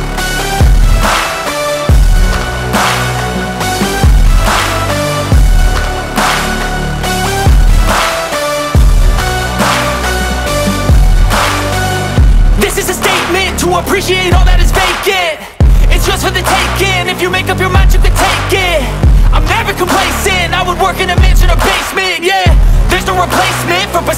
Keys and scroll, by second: 2.7 1, 3.2 Return, 9.4 Escape, 17.2 F3.